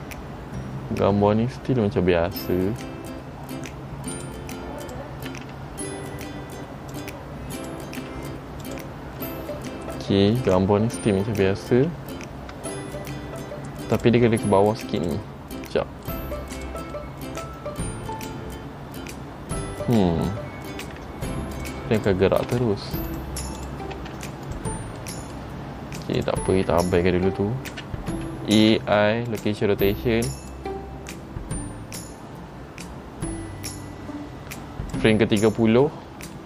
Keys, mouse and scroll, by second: 5.0 click, 5.4 r, 7.7 click, 8.2 r, 14.1 click, 15.2 click, 15.8 middle click, 16.7 click, 17.1 middle click, 22.1 click, 22.6 g, 23.7 click, 24.1 g, 25.1 middle click, 26.3 click, 26.9 scroll down 1, 27.9-28.3 scroll down 1, 27.9 a, 28.8 i, 30.7 click.